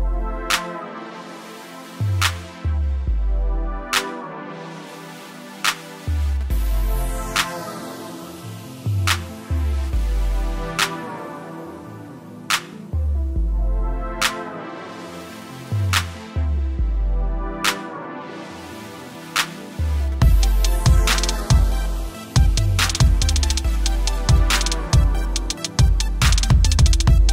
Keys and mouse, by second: 0.6 click, 4.0 click, 21.5 click, 23.4-23.8 typing, 26.0 typing.